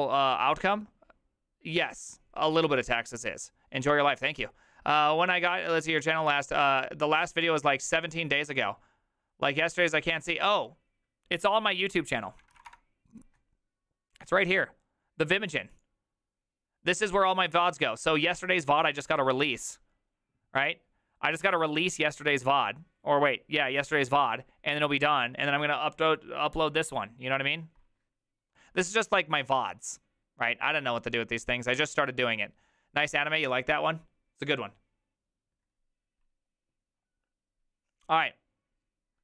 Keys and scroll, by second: 12.3-13.2 typing.